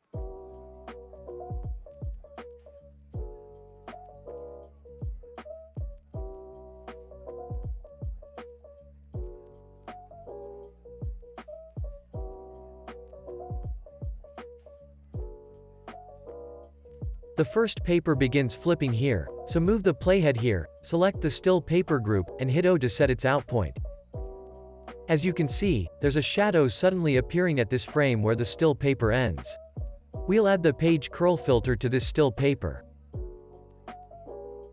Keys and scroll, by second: 2.6 o, 4.1 o, 6.8 o, 8.6 o, 10.2 super+s, 19.5 x, 23.0 o.